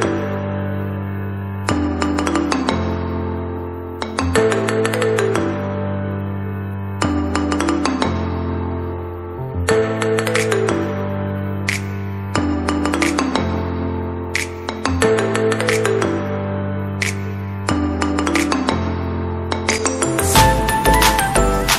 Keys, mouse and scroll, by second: 0.0 space, 0.1 alt+click, 0.3 ], 0.5-1.9 drag, 1.9 [, 2.2-5.4 drag, 5.9 space, 6.0 alt+click, 7.1 ctrl+z, 7.4 click, 9.8 space, 9.9 alt+click, 10.1 ], 10.2 click, 11.9 space, 12.0-14.1 ctrl+drag, 14.8 typing, 14.9-19.5 drag, 20.0-21.0 typing, 20.2 click, 20.4 ctrl+click.